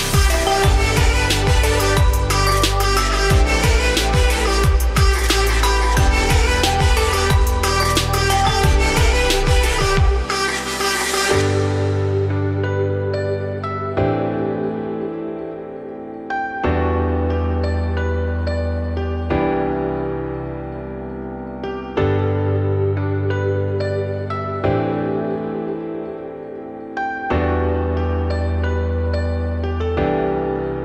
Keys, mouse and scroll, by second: 0.2 ctrl+click, 2.0 ctrl+z, 2.5 ctrl+click, 3.7 z, 4.1-4.6 middle drag, 4.6 scroll up 2, 6.2 F3, 7.3-8.6 middle drag, 8.6 s, 12.0-12.4 middle drag, 12.4-12.9 scroll up 3, 12.9 `, 13.7 `, 14.3-14.7 scroll up 2, 14.7 g, 18.9 scroll down 2, 19.1-20.0 middle drag, 20.0 click, 20.6-21.0 middle drag, 21.0 ctrl+z, 21.4-22.0 middle drag, 22.0 g, 24.6 scroll down 2, 24.7-25.2 middle drag, 25.2 click, 25.6-26.2 middle drag, 26.2 `, 26.8 scroll up 2, 27.1 shift+middle click, 27.4-27.8 scroll up 3, 27.8 shift+middle drag, 28.0-28.8 scroll up 2, 28.8 click, 29.3 g.